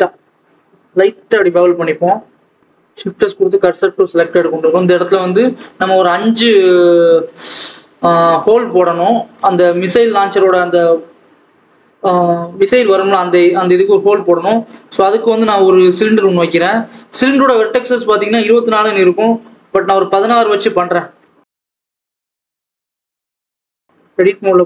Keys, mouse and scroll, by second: 1.9 alt+a, 2.6 shift+click, 3.1 shift+s, 3.3 alt+a, 4.3-5.0 scroll up 1, 5.0-7.3 scroll down 1, 7.3 click, 7.6-8.4 scroll up 1, 8.6 scroll down 1, 8.9 Tab, 15.8 shift+a, 19.8-21.3 drag, 21.3 Tab, 21.5 scroll down 1, 21.8 r, 22.5 r, 23.1 Tab, 23.5 Tab, 23.6 s, 24.3 KP_1.